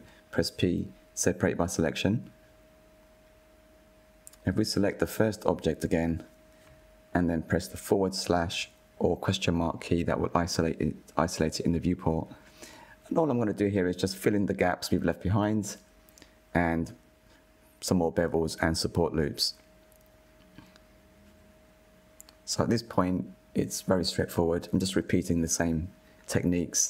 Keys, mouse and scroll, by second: 0.2 p, 3.2 Tab, 3.8 click, 4.6-5.3 drag, 5.3 click, 8.1 /, 9.4-10.7 middle drag, 10.7 Tab, 11.6 2, 12.3 alt+click, 14.2 f, 15.0 alt+click, 16.2 f, 16.8 middle click, 17.5 alt+click, 17.9 alt+shift+click, 18.1 middle drag, 18.3 scroll up 2, 18.6 ctrl+b, 20.2 middle click, 20.5 scroll down 2, 20.7 middle click, 21.3 ctrl+r, 22.0 click, 22.4 shift+middle click, 22.8 click, 22.9 middle click, 23.2 click, 23.3 middle click, 23.5 shift+click, 23.6 scroll up 1, 23.9 i, 25.2 click, 25.5 middle click, 25.6-26.0 scroll up 1, 26.0 ctrl+r, 26.7 click.